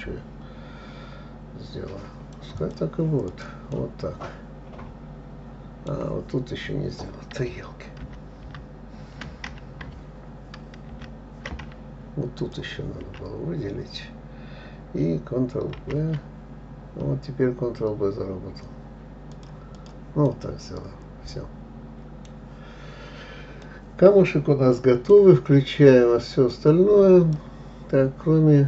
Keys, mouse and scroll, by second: 3.0 click, 3.7 click, 4.1-7.1 middle drag, 8.4 ctrl+z, 8.9 ctrl+z, 11.3 ctrl+z, 12.8 shift+click, 16.1 ctrl+b, 20.1 click, 20.7-22.7 middle drag, 22.7-23.2 scroll down 3, 23.2-24.0 scroll up 3, 24.0-26.9 middle drag, 26.9 click, 27.4-28.6 drag.